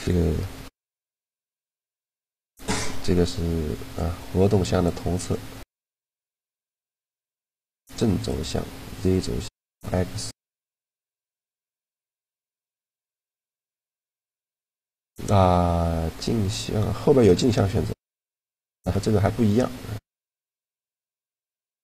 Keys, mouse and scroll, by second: 0.3 click, 5.2-7.0 middle drag, 6.3-9.7 drag, 11.3-13.3 middle drag, 13.3 click, 17.8 click, 18.7 a, 20.4 click.